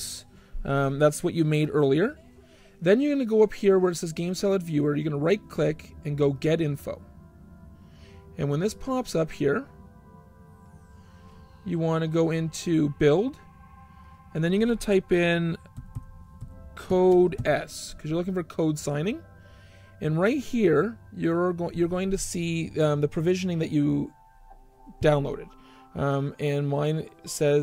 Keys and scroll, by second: 15.4-17.7 typing.